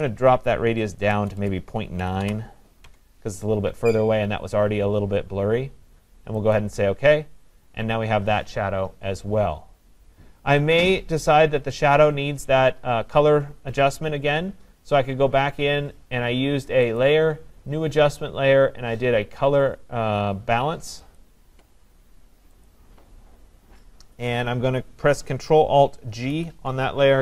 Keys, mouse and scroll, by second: 0.0 BackSpace, 1.2-2.9 typing, 2.9 Tab, 6.6-11.6 drag, 17.0-22.8 drag, 26.3 ctrl+alt+g, 26.3 click.